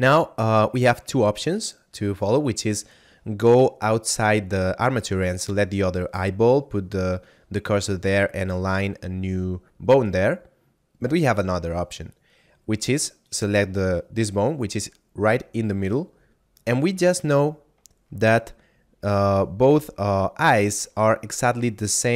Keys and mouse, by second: 13.2 right click.